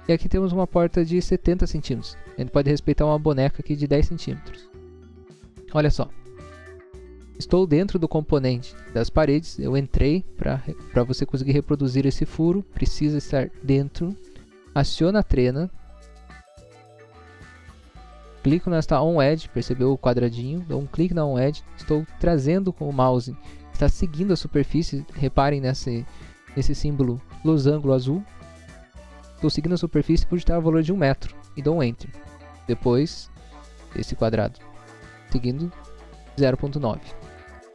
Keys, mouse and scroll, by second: 5.5 click, 6.6 middle click, 7.0 middle click, 7.3 scroll up 1, 8.5 scroll down 1, 14.2 click, 15.5 click, 16.8 scroll up 1, 20.8 click, 31.1 1, 31.7 Return, 33.6 click, 36.5 o.